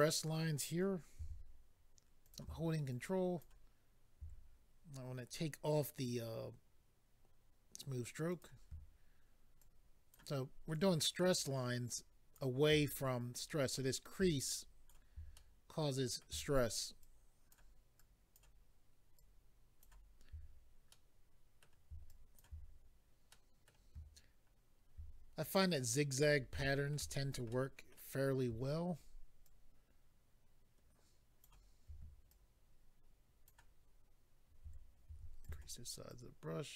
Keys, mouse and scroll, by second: 2.2 click, 2.2 f, 2.9 ctrl+click, 6.5 scroll down 1, 8.3 click, 8.4 click, 9.6 ctrl+click, 10.7 ctrl+click, 11.8 ctrl+click, 13.5 middle click, 14.5 ctrl+click, 15.3 middle click, 17.0 ctrl+click, 18.0 ctrl+click, 19.2 ctrl+click, 20.9 middle click, 22.1 ctrl+click, 23.3 middle click, 25.6 middle click, 26.6 shift+middle click, 27.2 scroll down 1, 27.5 middle click, 29.4 ctrl+click, 32.3 ctrl+click, 35.4 click, 35.4 f, 36.1 ctrl+click.